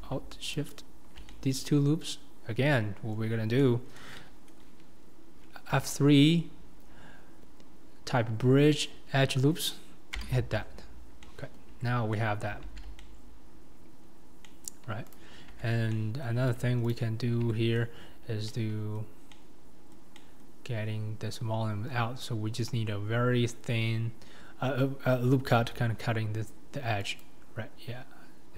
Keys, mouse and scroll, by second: 0.7 alt+shift+click, 1.3-10.3 middle drag, 11.2 middle click, 11.8 Tab, 12.1 scroll down 1, 12.1-12.6 middle drag, 12.6 alt+z, 13.0-14.1 middle drag, 14.1-14.4 scroll up 2, 14.4-15.1 middle drag, 15.1 click, 15.6 Tab, 15.9 middle click, 16.6 Tab, 16.9 click, 17.5 Tab, 18.5 scroll up 1, 18.5 middle click, 19.2 scroll up 3, 19.3-20.7 middle drag, 20.7-24.5 scroll up 2, 25.6 ctrl+r.